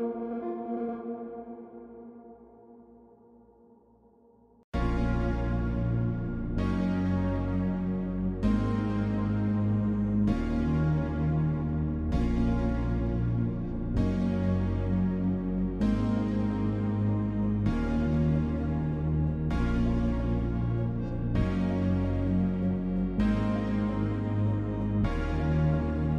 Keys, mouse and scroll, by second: 0.8 click, 24.9 click.